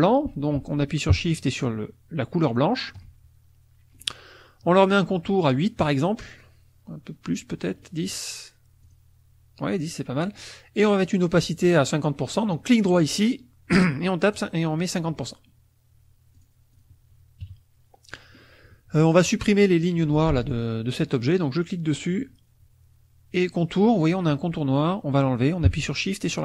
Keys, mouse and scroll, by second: 2.5 shift+click, 4.0 right click, 5.4 click, 7.8 right click, 8.8 click, 12.6 right click, 14.3 click, 16.3 click, 16.7 click, 17.4 KP_Subtract, 18.1 middle click, 20.1 F2, 20.5 click.